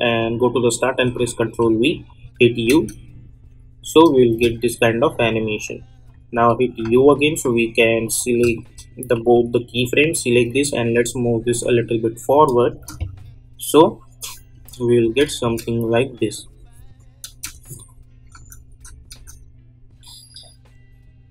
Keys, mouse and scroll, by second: 1.0 ctrl+v, 1.9 u, 2.7 space, 5.0 click, 6.3 u, 6.8 u, 7.4 u, 8.0 click, 8.5 shift+click, 9.1 u, 9.8-12.3 drag, 12.7 space, 16.3 click, 17.3 space.